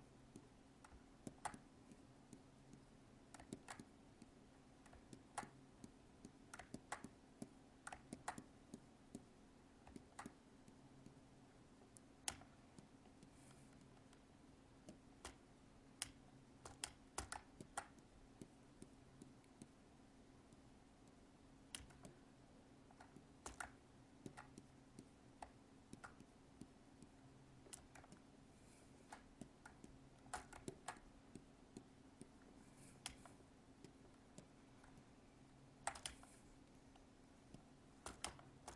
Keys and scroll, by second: 21.9 alt+space, 27.9 alt+space, 34.8 alt+space.